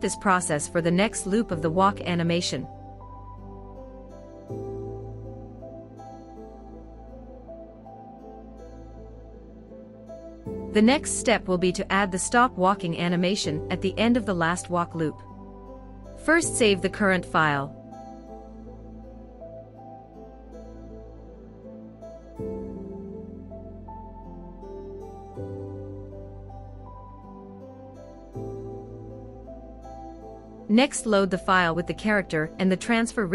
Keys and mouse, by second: 0.2 Left, 3.5-4.6 drag, 6.2 space, 9.5 space, 10.7-11.5 drag, 14.0 h, 16.9-18.8 drag, 31.2-32.4 drag.